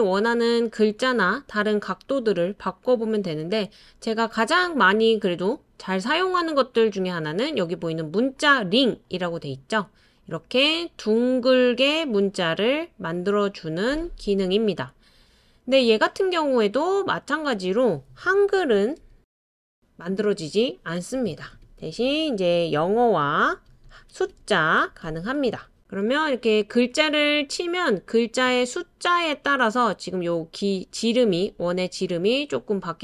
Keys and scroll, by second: 18.3-24.7 typing.